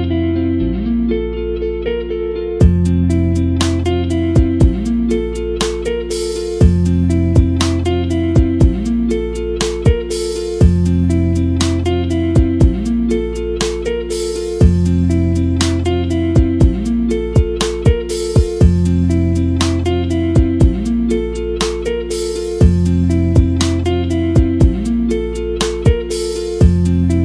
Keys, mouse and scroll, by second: 12.3 click, 18.6 KP_Decimal, 19.2-19.6 scroll up 1, 19.6 click.